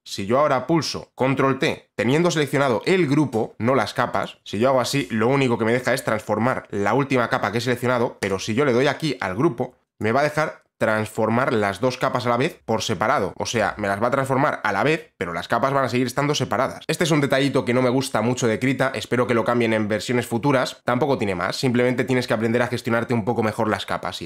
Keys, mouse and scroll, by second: 1.4 click, 1.9 ctrl+t, 4.3 click, 8.4 click, 10.1 click, 11.8 click, 16.8 click.